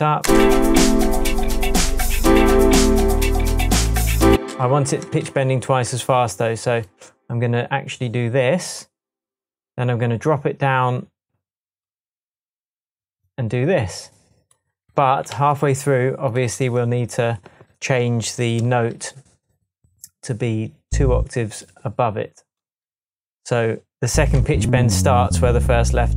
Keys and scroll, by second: 0.2 space, 2.9 super+z, 4.3 space, 5.1 space, 5.2 super+z, 15.3 Tab.